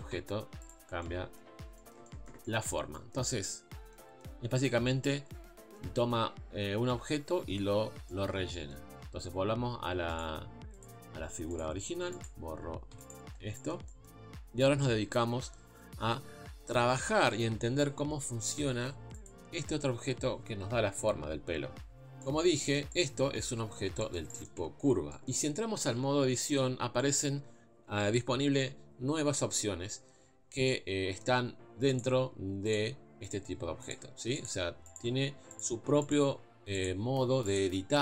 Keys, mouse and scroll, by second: 0.7 z, 10.2 click, 11.6 click, 12.3 click, 13.1 x, 14.5-19.3 scroll up 1, 19.3 click, 23.7 ctrl+space, 24.0 middle click, 24.6 Tab, 25.1-32.0 middle drag, 32.0 click, 32.7 click, 33.3 click, 33.9 click, 34.5 click, 34.9 click, 35.6 click, 36.1 click, 36.9 click, 37.5 click.